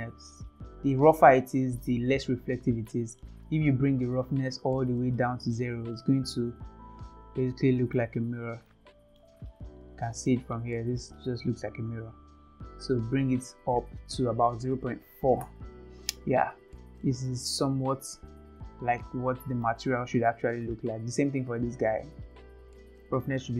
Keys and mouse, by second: 1.1-2.1 drag, 2.8-3.2 middle drag, 4.7 click, 6.0-8.0 middle drag, 8.7-9.2 middle drag, 10.3 shift+middle click, 13.7-16.0 drag, 17.0-19.7 middle drag, 20.8 click, 22.7-23.5 drag.